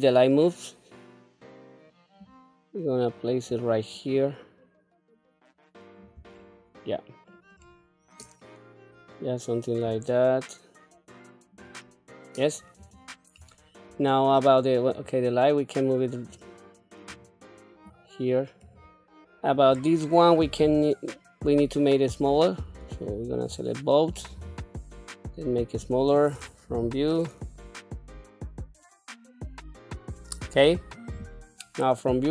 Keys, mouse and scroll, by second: 0.1 scroll down 2, 2.5-3.8 drag, 4.4-6.3 drag, 6.7 middle click, 7.8 scroll up 2, 10.1-11.9 drag, 13.0 click, 13.7 scroll down 2, 14.3 middle click, 15.2 click, 16.5 click, 18.1 click, 19.8 click, 20.9 s, 23.1 shift+click, 24.6 s, 26.9-29.1 typing, 28.6 scroll up 2, 28.7 click, 28.9 click, 29.3 click, 29.5 click, 29.7 middle click, 29.8 click, 30.1 scroll down 1, 31.4 KP_1.